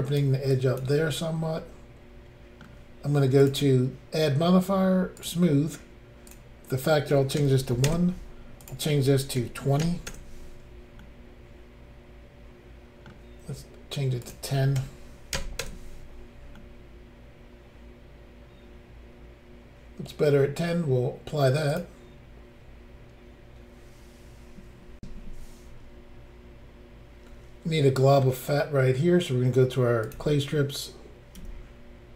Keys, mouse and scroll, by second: 0.5 ctrl+click, 1.6 middle click, 3.4 click, 3.5 click, 5.2 click, 5.3 click, 6.3 click, 6.5 click, 7.4 1, 7.9 Return, 8.6 click, 9.4-9.8 typing, 10.1 Return, 11.0 middle click, 11.0 0, 14.2 click, 14.8 click, 15.4 0, 15.6 Return, 16.6 middle click, 21.7 click, 21.8 click, 25.0 Insert, 30.0 click, 30.1 click, 31.4 f.